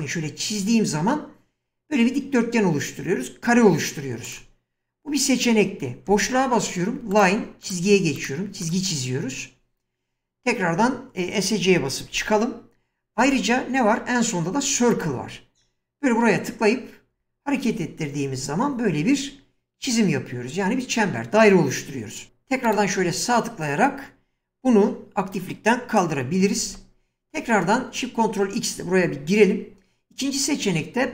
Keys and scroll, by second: 6.1 space, 10.8 Escape, 12.2 shift+x, 13.2 space, 26.7 ctrl+x.